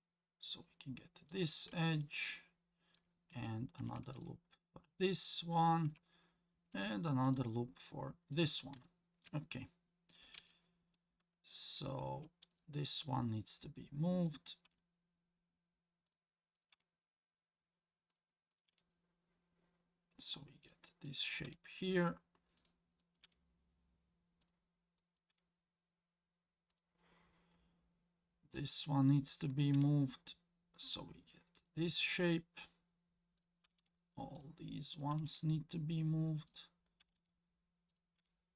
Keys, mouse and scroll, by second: 1.8-3.0 shift+middle drag, 3.8 ctrl+r, 6.7 ctrl+r, 8.8 shift+middle click, 9.5 scroll up 1, 10.5 shift+middle click, 12.5 click, 14.3 click, 14.6 g, 16.6 click, 16.7 g, 18.5 click, 18.7 g, 21.0 click, 21.4 g, 23.0 click, 23.2 g, 25.0 click, 25.3 g, 28.6 click, 29.7 g, 33.4 click, 33.6 g, 35.0 click, 35.1 g, 36.5 click, 37.0 g, 38.2 g.